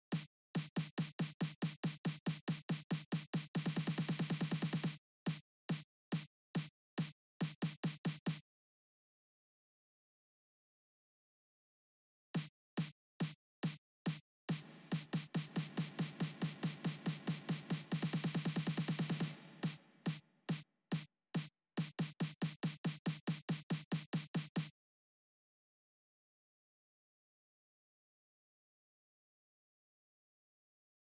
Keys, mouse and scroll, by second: 0.2 click, 6.2 click, 8.2 space, 9.3 click, 10.9 click, 12.1 space, 13.7-15.4 drag, 16.6-18.0 drag, 18.3-21.0 drag, 22.0 click, 24.3 space, 27.2 click, 28.2 click, 29.0 click, 30.6 click, 31.0 space.